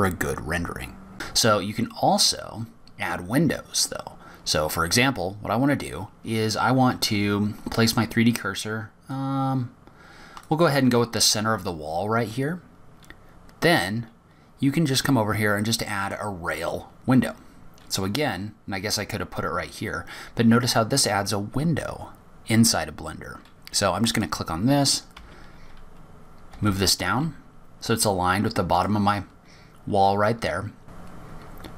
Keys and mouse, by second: 20.8 click, 29.9 g.